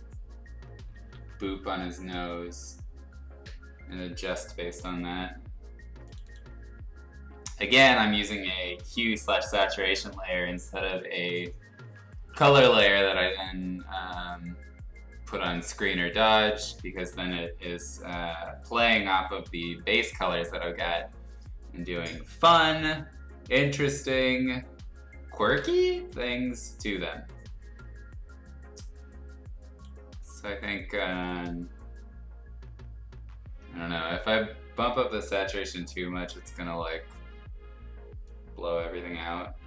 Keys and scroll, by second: 0.9 ctrl+z.